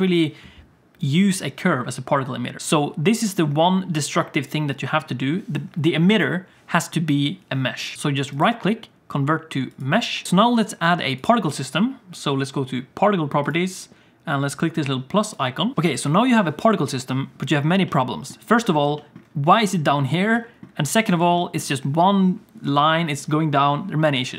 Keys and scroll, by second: 7.9 Tab, 10.1 Tab, 10.2 alt+a, 10.8 alt+a, 16.6 space.